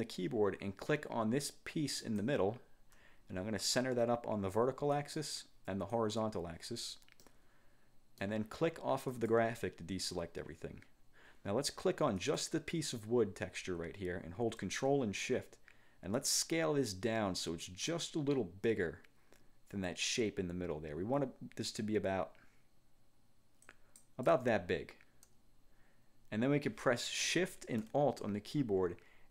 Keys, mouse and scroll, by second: 2.1 shift+click, 5.0 click, 6.0 click, 7.3-8.6 drag, 9.2 click, 12.3 click, 16.3-24.3 ctrl+shift+drag.